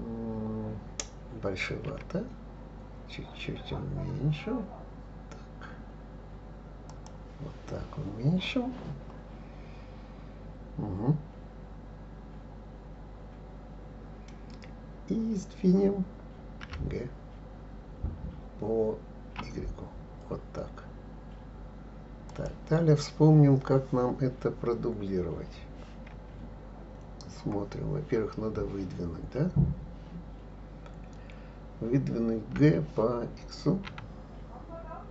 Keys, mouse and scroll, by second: 1.9 s, 16.6 g, 26.1 KP_1, 32.5 g.